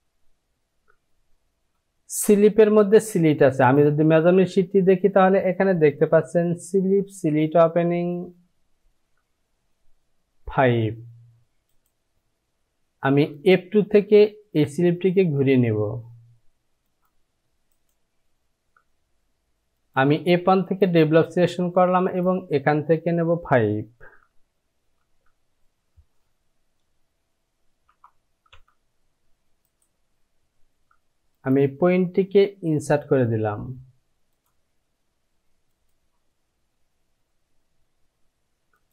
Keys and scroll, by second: 12.1 j, 18.2 Home, 26.0 Down, 28.5 Return.